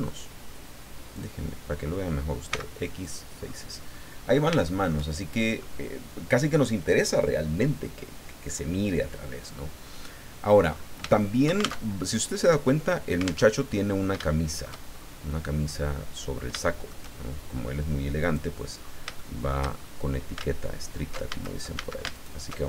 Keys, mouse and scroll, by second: 1.1 click, 2.5 x, 3.0 click, 3.4 scroll down 2, 3.9 middle click, 5.6-6.8 drag, 10.7-11.0 scroll up 3, 11.1 shift+click, 11.8 alt+shift+Tab, 13.4 alt+Tab, 13.7-14.3 alt+scroll up 5, 14.3 shift+middle click, 14.9-15.2 shift+scroll up 1, 15.3-15.6 scroll down 1, 15.8 middle click, 16.6 shift+middle click, 18.2 click, 19.2 shift+middle click, 21.3 alt+shift+a, 22.1 alt+shift+right click.